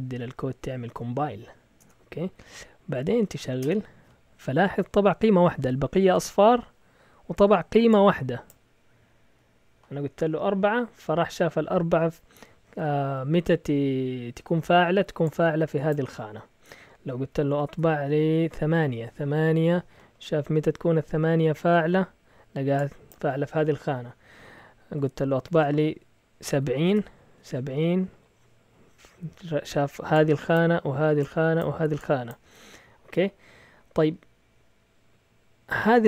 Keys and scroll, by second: 0.0-4.1 typing, 17.6 BackSpace, 18.5 8, 18.8 Return, 24.4 Up, 25.0 BackSpace, 26.4-26.8 typing, 26.8 Return.